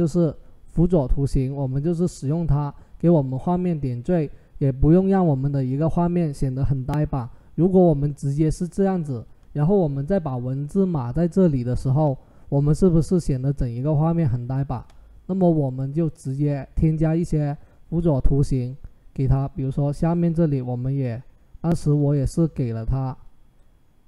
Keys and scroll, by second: 22.4 ctrl+t.